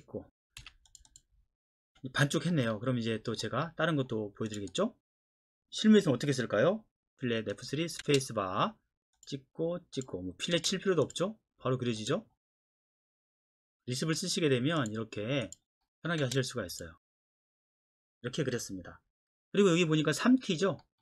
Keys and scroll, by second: 0.6 Escape, 7.2 f, 8.0 space, 10.6 space, 13.3 space, 16.2 space.